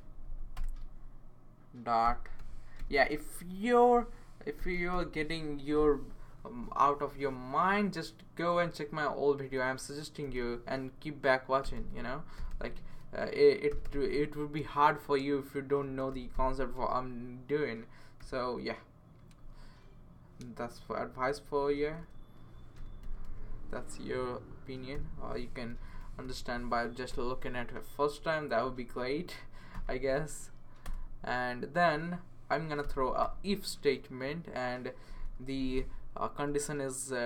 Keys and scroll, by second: 0.1 Down, 0.3 Down, 0.5 Return, 1.8-2.8 typing, 4.3-5.4 typing, 10.2 typing, 11.4-14.2 typing, 15.6-16.8 typing, 18.2 typing, 20.8 Left, 21.1 Left, 21.5 Right, 22.5-26.5 typing, 24.4 Right, 27.1 Return, 28.0 Tab, 28.8 shift+Tab, 29.7 typing, 30.8 Return, 32.8-33.2 typing, 34.8-35.6 typing, 36.4 Left.